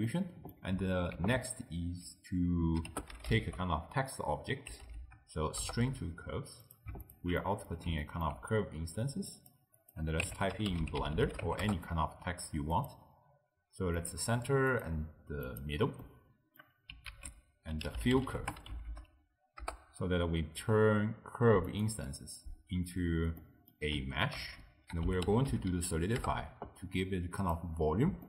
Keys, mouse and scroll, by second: 0.1-1.2 middle drag, 1.2 ctrl+a, 7.1 alt+shift+click, 7.5-9.3 middle drag, 9.3 click, 9.9-16.0 drag, 16.0-17.1 middle drag, 17.1 ctrl+a, 18.3 l, 23.5-24.5 middle drag, 24.5 ctrl+a.